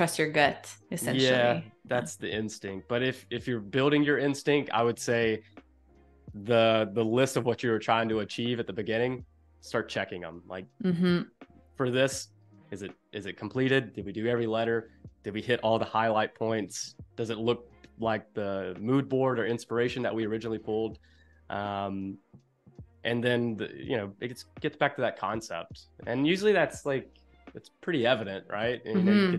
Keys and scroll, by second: 0.1 space.